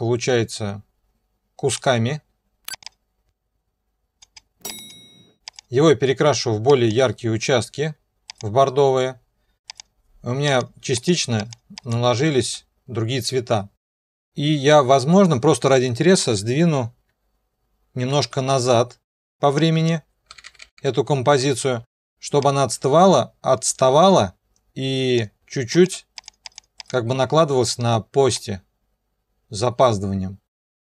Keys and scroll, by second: 16.3 alt+Page_Down, 20.3-21.8 typing.